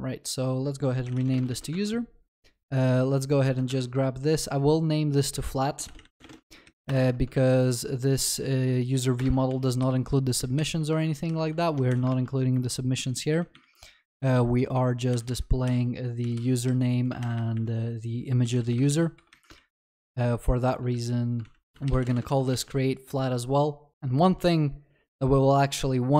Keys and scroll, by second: 1.6 ctrl+s, 7.3 ctrl+z, 9.5 ctrl+v, 10.5 ctrl+s, 11.0 ctrl+y, 11.9 ctrl+z, 12.1 ctrl+y, 15.1 ctrl+Delete, 15.6 Delete, 16.3 Escape, 18.9 ctrl+Delete, 18.9 ctrl+s, 25.7 ctrl+d.